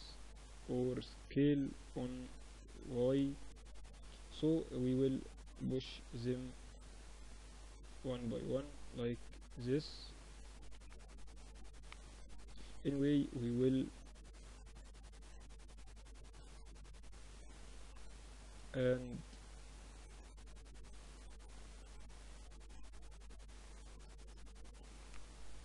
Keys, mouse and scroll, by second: 1.3 s, 4.0 click, 4.7-5.9 middle drag, 5.8 click, 6.1 middle click, 6.1 click, 6.1 right click, 6.3 middle click, 6.3 click, 6.3 right click, 6.5 middle click, 6.5 click, 6.5 right click, 6.6-10.9 middle drag, 8.3 z, 9.7 s, 13.3 right click, 13.9-15.6 middle drag, 15.6 z, 16.9 Tab, 17.1 click, 17.7-18.8 middle drag, 19.9 Tab, 22.6 Tab.